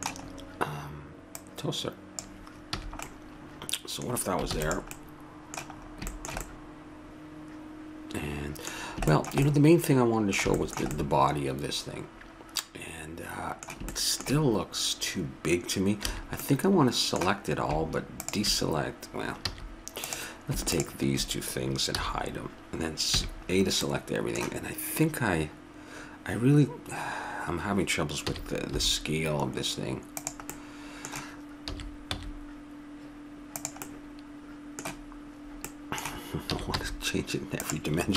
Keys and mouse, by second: 1.3-2.7 drag, 2.7 a, 2.9 middle click, 4.5 ctrl+s, 6.5-8.1 middle drag, 8.8-12.8 middle drag, 13.9-16.0 middle drag, 16.0 a, 16.4-18.3 middle drag, 18.3-21.1 right drag, 19.5 a, 21.1-22.5 drag, 21.9 h, 23.2 a, 23.5-25.2 middle drag, 28.2 s, 30.5-32.4 middle drag, 31.7 s, 33.8-37.5 middle drag, 36.5 s.